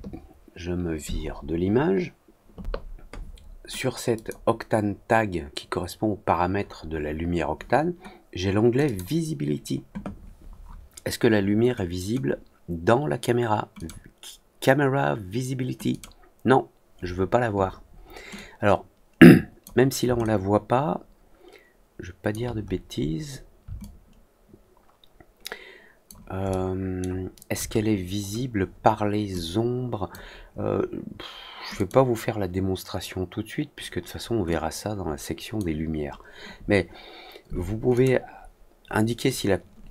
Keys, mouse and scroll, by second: 4.1 click, 8.8 click, 13.7 click, 15.8 click, 18.3-19.5 drag, 20.1-22.2 alt+drag, 22.7 middle click, 22.9 middle click, 23.7-26.0 alt+drag, 26.5-26.9 alt+middle drag, 27.6 scroll up 1, 28.1 middle click, 29.3 click, 31.7 click, 34.4-35.5 drag, 37.9 click.